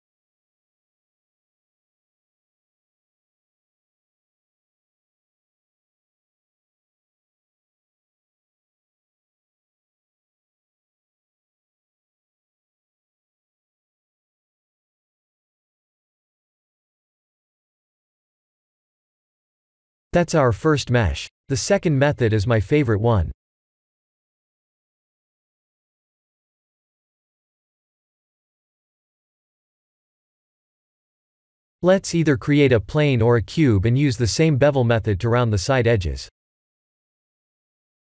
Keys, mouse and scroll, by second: 0.7 alt+shift+click, 2.2 click, 3.3 click, 4.2 click, 6.5 click, 7.0 click, 7.3 Tab, 7.7 middle click, 8.6-9.1 scroll down 2, 9.1 click, 9.1 scroll down 1, 9.5 middle click, 10.5 click, 13.4 click, 14.4 click, 16.6 click, 16.9 middle click, 17.0 middle click, 21.1 middle click, 21.3 middle click, 21.8 click, 22.4 KP_1, 22.7 KP_7, 23.4-24.0 scroll down 8, 24.0 g, 26.6 middle click, 27.9-28.6 scroll up 4, 28.6 middle click, 29.8 KP_1, 30.4 click, 30.9 shift+a, 35.8-36.4 scroll up 1, 36.4 scroll up 2, 36.7 middle click, 37.5 Tab, 37.8 middle click.